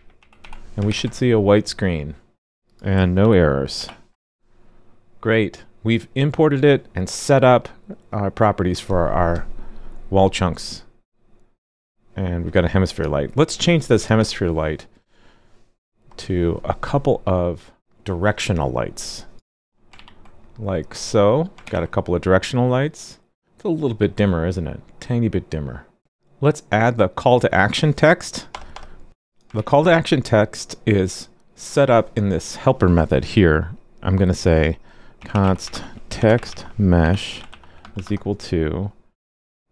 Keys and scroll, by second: 0.9 super+s, 3.2 alt+super+j, 3.7 alt+super+j, 19.3 super+c, 19.9 super+v, 21.6 super+s, 29.5 super+s.